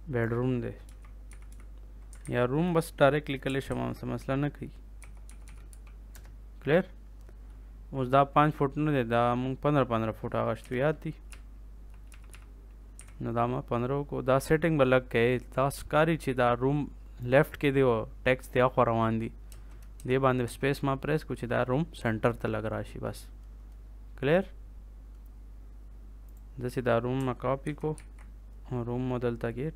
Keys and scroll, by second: 0.8 b, 1.2 e, 2.1 ctrl+a, 3.6 ctrl+z, 4.7-6.1 typing, 10.5 1, 11.3 Right, 12.9 1, 19.4 space, 27.6 ctrl+c, 27.9 ctrl+v.